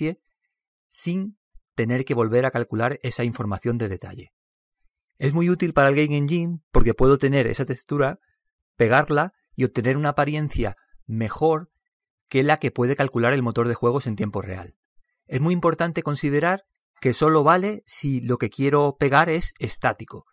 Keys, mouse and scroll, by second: 5.2-7.1 middle drag.